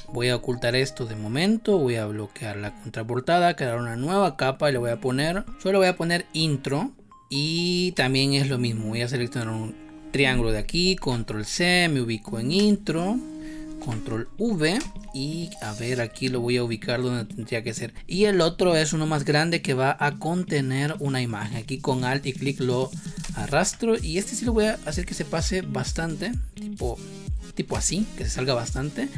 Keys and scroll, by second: 7.8 space, 10.9 ctrl+c, 12.5 space, 13.7 ctrl+v, 14.9 space, 23.1 space, 27.6 space.